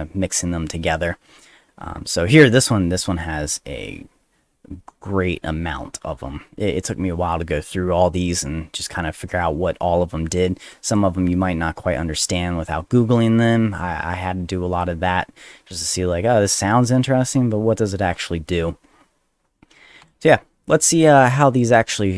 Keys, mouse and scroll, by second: 1.6-1.9 scroll down 4, 2.6-4.8 scroll down 4, 4.8-5.7 scroll down 1, 5.7 scroll down 1, 5.9 middle click, 6.1 middle click, 7.9 middle click, 8.4 middle click, 9.2 middle click, 10.4 click, 10.9 click, 11.2-12.2 middle drag, 12.2 click, 20.0 click, 20.7 click, 21.9-22.1 drag.